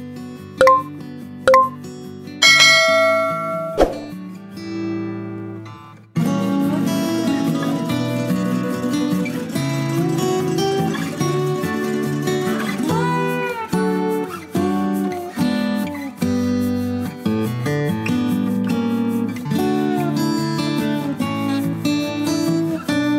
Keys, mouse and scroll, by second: 0.4 Tab, 1.5 ctrl+r, 3.3 ctrl+r, 5.6 a, 6.8 click, 8.6 alt+j, 9.5 ctrl+middle click, 12.0 KP_1, 13.2 click, 14.0 click, 14.6 shift+click, 14.9 shift+click, 15.3 shift+click, 16.4 shift+g, 18.2 click, 18.8 click, 19.6 KP_0, 21.0 click, 21.4 x, 22.8 KP_7.